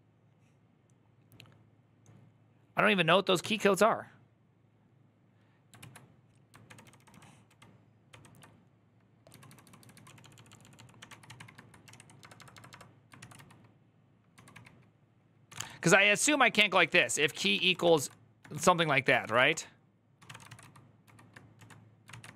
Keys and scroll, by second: 3.2 ctrl+c, 5.6 alt+{, 6.4 ctrl+d, 6.6 ctrl+d, 6.9 ctrl+d, 8.8-22.3 typing, 21.9 ctrl+c.